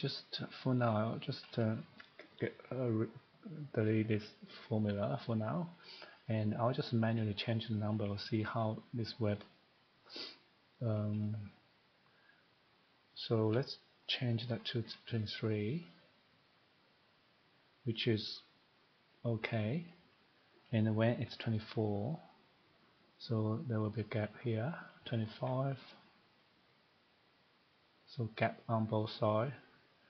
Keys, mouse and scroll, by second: 1.0 click, 4.8 Delete, 6.2 click, 10.1 click, 10.7 click, 14.2 typing, 15.5 click, 19.6 click, 20.7 click, 21.0-21.3 typing, 22.1 click, 24.8 click, 25.1 typing, 26.4 click.